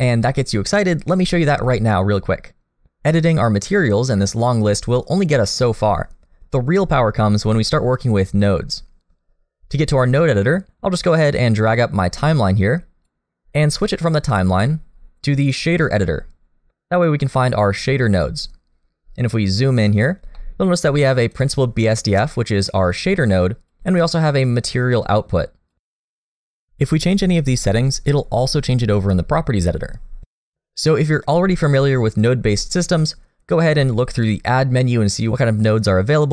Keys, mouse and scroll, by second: 5.2-8.5 scroll up 5, 10.4 click.